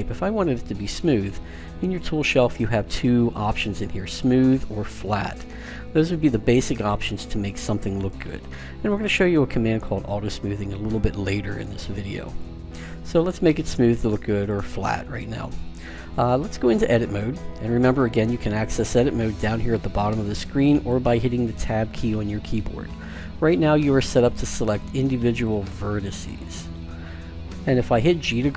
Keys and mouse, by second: 4.1-10.8 drag, 12.3-14.2 drag, 14.4-16.3 drag, 17.1-19.0 drag, 24.1-25.9 drag, 25.9-28.5 right drag.